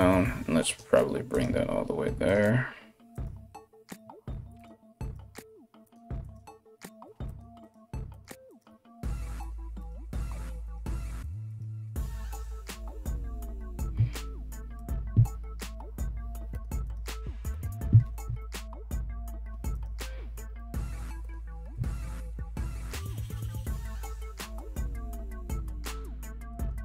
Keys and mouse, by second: 0.9 right click, 1.1 g, 2.7 right click, 2.9 g, 4.6 right click, 4.8-5.8 middle drag, 4.8 g, 5.8 right click, 5.9-7.2 middle drag, 6.0 g, 7.2 right click, 7.3 middle click, 7.3 g, 8.1 right click, 8.1-9.4 middle drag, 8.3 g, 9.4 right click, 9.5 middle click, 9.5 g, 10.2 right click, 10.3 middle click, 10.3 g, 11.1 right click, 11.2 middle click, 11.2 g, 12.0 right click, 12.1-14.3 middle drag, 12.1 g, 14.3 right click, 14.4-16.4 middle drag, 14.9 g, 16.4 right click, 16.5-19.3 middle drag, 16.6 g, 19.3 right click, 19.4-24.2 middle drag, 20.0 g, 21.3 s, 24.2 alt+right click, 24.4-26.8 alt+middle drag, 25.0 g.